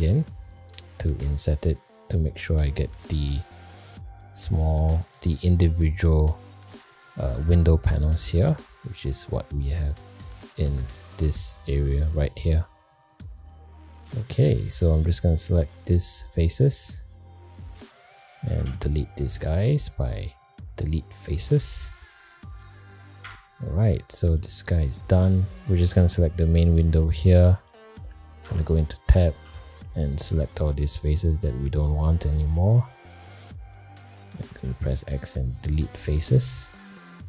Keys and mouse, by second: 15.3 click, 16.4 shift+click, 16.9 shift+click, 17.4 shift+click, 17.7 shift+click, 18.6 x, 22.5 middle click, 23.2 Tab, 24.3 middle drag, 24.8 shift+middle drag, 26.0 click, 26.7-27.4 middle drag, 27.6 shift+middle drag, 28.4 Tab, 28.9 middle click, 29.4 3, 29.6 click, 30.4 shift+click, 30.7 shift+click, 31.0 shift+click, 33.0 shift+click, 33.6 shift+click, 34.5 x, 36.2 middle click, 36.7 Tab.